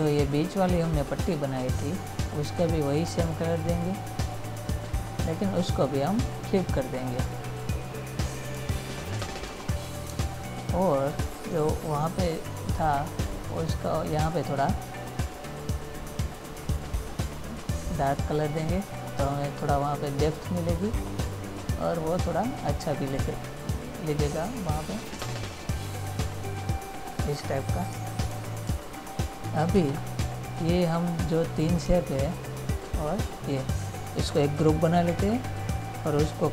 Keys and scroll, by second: 10.4 space, 28.2 ctrl+-, 30.0 ctrl++, 35.4 ctrl+g.